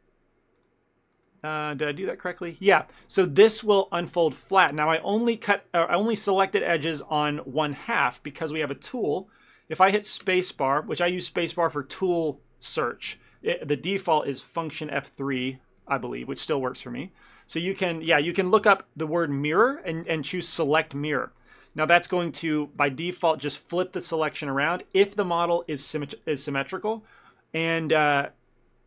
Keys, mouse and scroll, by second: 0.7 ctrl+click, 1.2 ctrl+middle click, 1.5 shift+middle click, 3.2 ctrl+middle click, 10.3 space, 15.5 F3, 22.2 shift+middle click, 22.6 middle click, 22.9 ctrl+middle click, 23.1 shift+middle click.